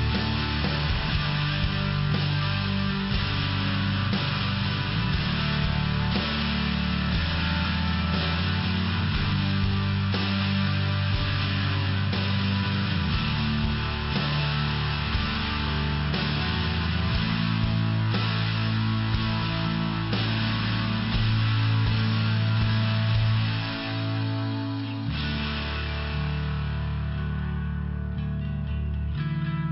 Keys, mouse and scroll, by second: 1.3 click, 2.9 click, 5.5 click, 6.5 click, 8.1 click, 11.7 click, 11.8 click, 16.2 click, 16.3 click, 17.8 click, 17.9 click, 18.4 click, 18.5 click, 19.0 click, 19.1 click, 19.9 click, 20.0 click, 20.5 click, 21.5 click, 21.8 click, 22.6 click, 23.5 click, 24.5 click, 26.6 click, 27.2 click, 27.6 click, 28.3 click.